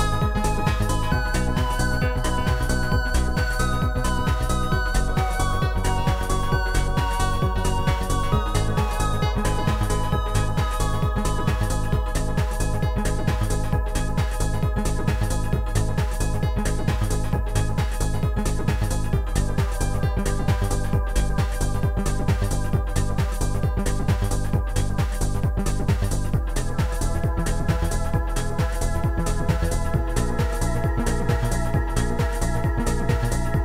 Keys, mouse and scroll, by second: 0.8 shift+click, 1.6 right click, 1.6 click, 2.2 right click, 2.4 click, 3.9 click, 4.8 click, 6.1 click, 6.3 click, 8.2 click, 10.1 click, 11.4 click, 12.1 click, 14.4 click, 15.5 click, 18.6 click, 19.5 ctrl+click, 20.7 ctrl+click, 21.1 ctrl+click, 22.0 ctrl+click, 26.1 click, 27.5 ctrl+click, 28.8 ctrl+click, 30.2 ctrl+click, 32.2 click, 33.0 click, 33.3 click.